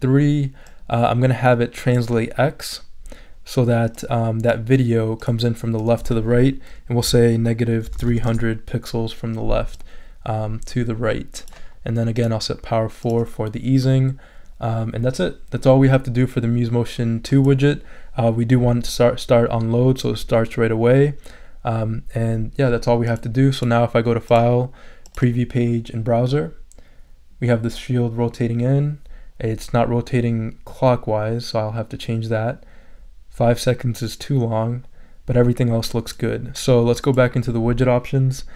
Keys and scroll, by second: 7.9 0, 8.3 Return.